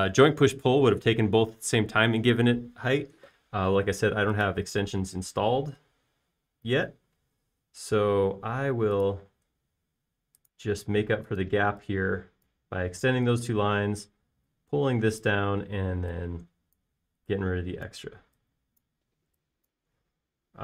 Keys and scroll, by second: 11.0 l, 12.7-14.4 typing, 16.8 e.